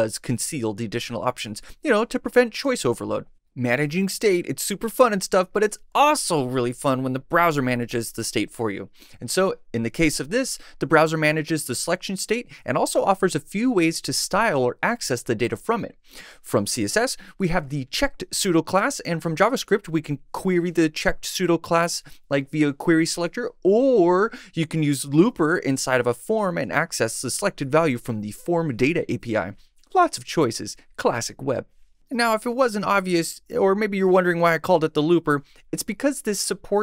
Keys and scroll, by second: 7.6 Tab, 8.1 Right, 12.3 Left, 14.0 Right.